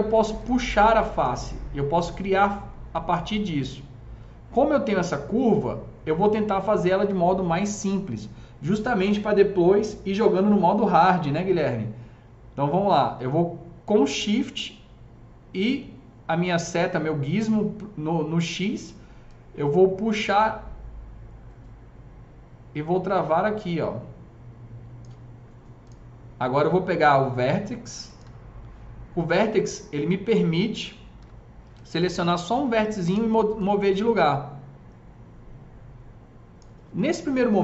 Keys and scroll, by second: 33.0 s.